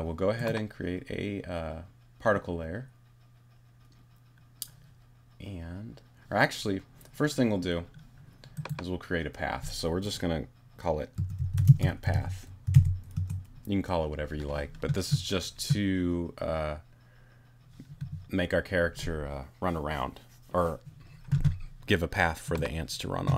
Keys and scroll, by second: 10.9-13.2 typing.